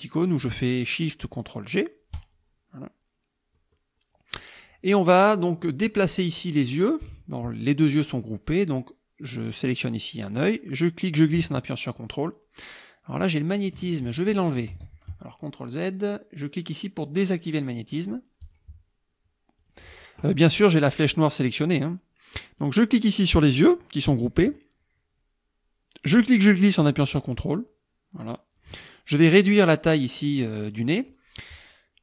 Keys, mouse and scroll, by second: 2.2 click, 3.6 click, 4.6 click, 4.9 click, 6.3 click, 10.4-13.8 drag, 14.7 ctrl+z, 18.4 click, 19.6 click, 22.6 click, 26.1-28.8 drag, 29.6 click.